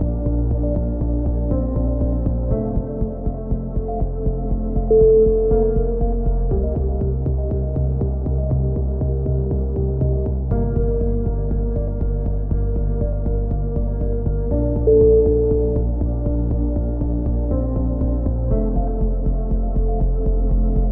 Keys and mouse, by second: 5.1 middle click, 5.1 z, 5.8-6.9 drag, 6.6 z, 6.9 middle click, 7.0 click, 9.0 a, 10.5 middle click, 10.5 z, 10.9 right click, 11.3 z, 11.6 click, 13.7 a, 14.2 middle click, 14.8 right click, 15.3 click, 17.2 a, 17.4 z, 18.2 Tab, 18.8-19.8 drag, 20.2 KP_3.